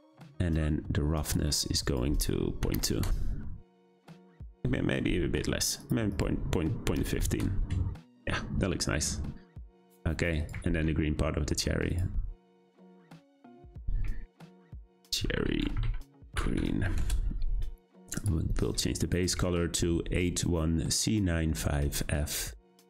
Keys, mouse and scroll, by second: 1.8-5.9 drag, 6.1-11.9 drag, 12.9-17.0 drag, 17.0 e, 18.1 click.